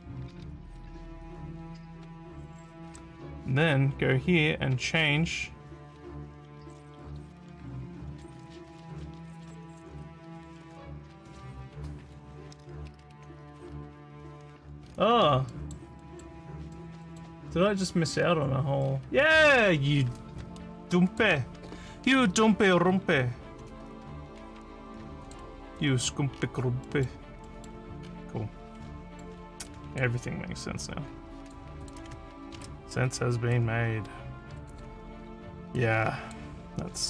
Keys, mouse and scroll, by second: 14.9 scroll down 2, 15.6 middle click, 16.0 middle click, 16.8 middle click, 17.5 middle click, 18.2 scroll down 3, 18.9 scroll down 1, 20.6 click, 22.6 ctrl+c, 25.3 click, 25.8 middle click, 26.4 scroll down 4, 26.9 middle click, 27.5 middle click, 28.1 scroll down 1, 28.8 middle click, 29.7 click, 30.9 click, 31.9 click, 32.6 ctrl+v, 33.5-34.7 drag, 35.8 click.